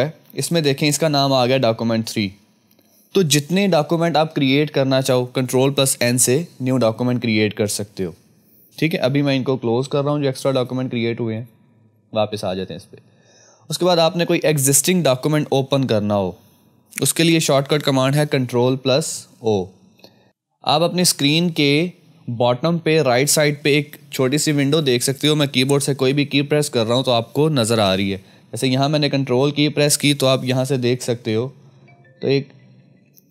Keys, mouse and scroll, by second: 0.4 click, 3.5 F1, 10.5 click, 18.3 click, 18.3 F2, 20.0 F1, 28.2 ctrl+Num_Lock, 30.4 F2, 32.8 F2.